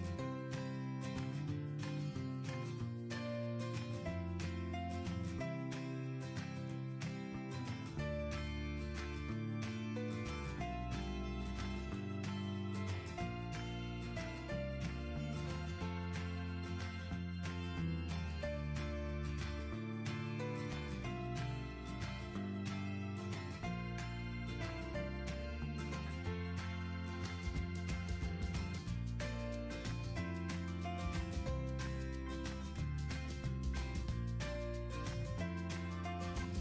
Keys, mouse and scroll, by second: 0.0 click, 5.9 click, 6.6 click, 6.8 scroll, 7.6 scroll, 8.1-8.6 scroll up 3, 8.6 scroll down 3, 9.2 click, 9.6 click, 10.6 scroll up 2, 11.2 middle click, 11.9 middle click, 12.7 middle click, 13.1-13.7 scroll down 6, 13.7-14.3 scroll up 3, 14.7 middle click, 15.6 middle click, 17.1-18.2 drag, 19.0-20.1 drag, 21.8-23.0 drag, 23.1-24.3 drag, 24.5 click, 25.8-26.6 scroll up 1, 26.6-27.7 scroll up 6, 28.9 scroll, 29.3 scroll up 1, 29.6 scroll, 31.1 right click, 31.8 click, 32.9 middle click, 33.1 middle click, 34.5 click.